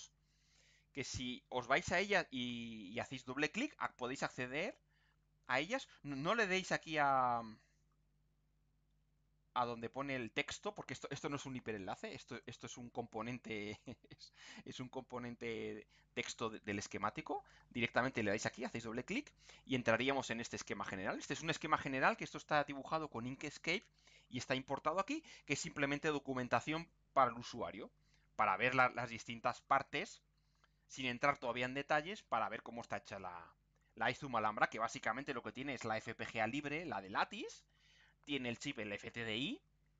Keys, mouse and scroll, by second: 7.4-7.8 scroll up 2, 12.4 click, 13.8 click, 16.9-17.2 scroll down 2, 17.4 scroll up 2, 18.3 click, 20.6-21.2 scroll up 2, 21.4 scroll down 2, 25.4-25.7 scroll up 2, 26.6 scroll down 2, 27.6 scroll down 2, 28.2-29.0 scroll up 4, 29.4 scroll down 2.